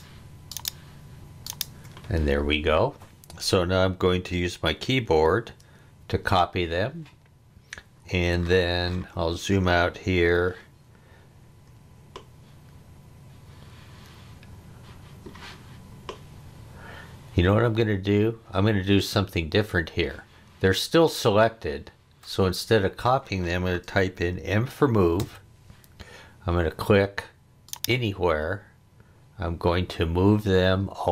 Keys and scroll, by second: 6.0 super+c, 25.2 m.